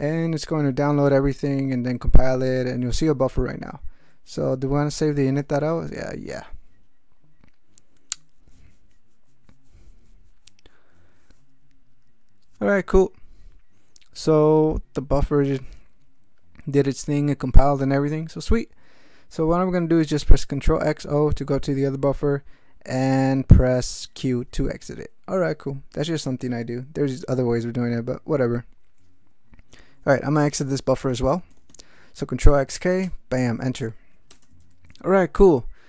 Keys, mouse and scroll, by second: 6.3 y, 20.4 ctrl+x, 20.8 ctrl+o, 24.6 q, 31.5 ctrl+x, 31.7 ctrl+k, 33.0 Return, 34.3 Return, 35.6-35.8 typing.